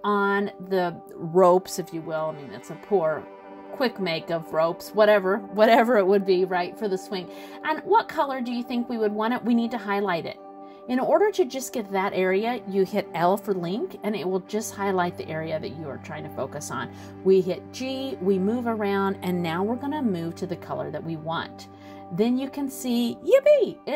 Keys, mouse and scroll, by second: 4.5 l, 5.5 l, 8.7 scroll down 1, 8.8 middle click, 15.5 g, 21.4 click, 22.2 middle click, 23.8 scroll up 2.